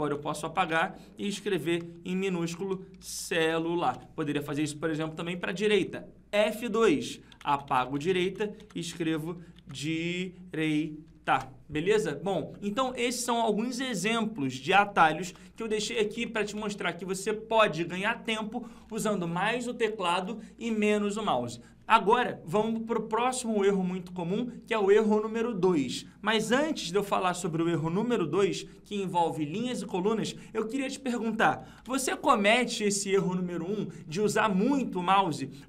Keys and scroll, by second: 6.4 F2, 26.9 ctrl+Page_Down, 31.7 ctrl+Page_Up.